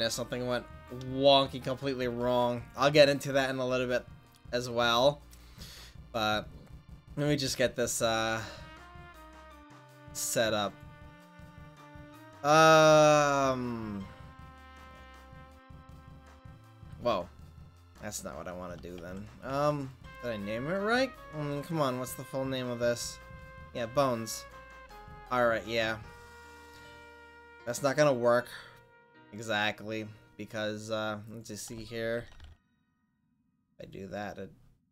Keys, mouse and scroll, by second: 2.2 ctrl+s, 17.6 ctrl+z, 19.1 Tab, 22.1 click, 24.6-25.8 drag, 26.8 click, 27.3-34.0 drag.